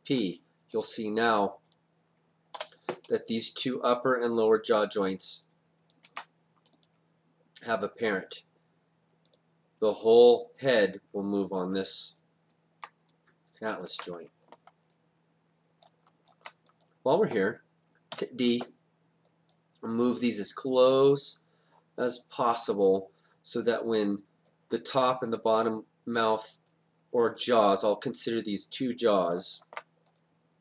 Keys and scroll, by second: 2.6 e, 6.1 ctrl+z, 13.9 ctrl+z, 18.2 d.